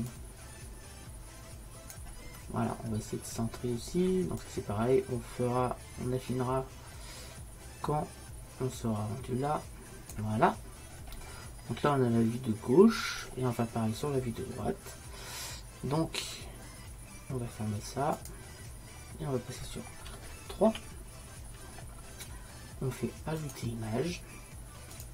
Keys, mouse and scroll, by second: 0.2-2.0 drag, 4.5-6.6 drag, 11.2 middle click, 13.6-15.3 middle drag, 18.2-20.7 drag, 23.5 click.